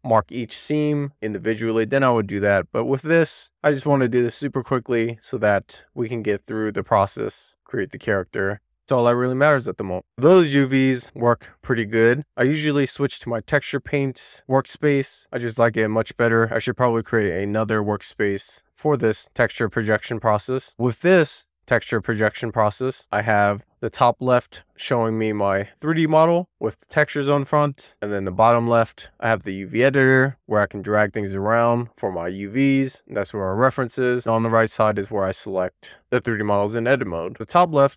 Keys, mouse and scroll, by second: 6.0 Tab, 8.8-9.8 scroll down 3, 9.8 shift+middle click, 10.6-10.9 scroll down 2, 11.1 shift+middle click, 11.3 scroll up 1, 12.1 click, 15.9 click, 17.0-18.2 drag, 19.2-20.4 drag, 20.9-21.2 scroll down 1, 21.5 scroll down 2, 21.6-22.7 drag, 23.0 scroll down 3, 23.2 shift+middle click, 23.6-26.1 scroll down 1, 37.4 click.